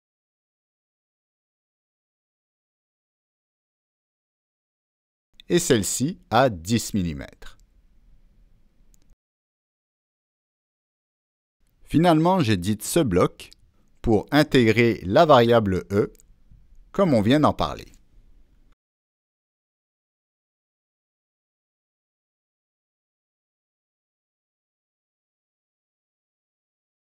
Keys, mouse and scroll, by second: 0.9 middle click, 1.4 middle click, 3.0 click, 4.8 scroll down 1, 5.6 click, 6.0-6.3 scroll up 1, 7.4 click, 7.9 click, 9.2 Return, 11.8 click, 12.5 Escape, 13.6 click, 16.2 click, 18.0 click, 18.1 click, 20.5 click, 21.2 Down, 21.5 Return, 22.5 Return, 24.5 click, 24.8 Return, 24.8 Down, 26.8-27.0 drag.